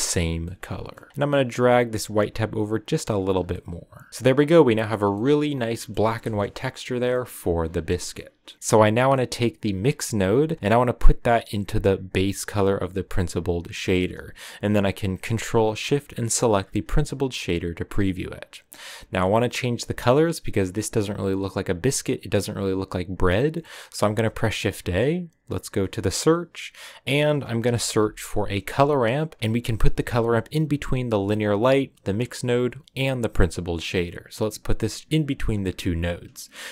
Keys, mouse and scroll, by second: 0.4 middle click, 1.3-3.3 drag, 3.3 scroll down 3, 3.5 middle click, 4.1 a, 4.1 middle click, 4.8 scroll up 4, 5.1-6.3 middle drag, 6.3 KP_0, 7.0-8.5 shift+middle drag, 8.5-13.1 drag, 16.3 ctrl+shift+click, 35.0 click.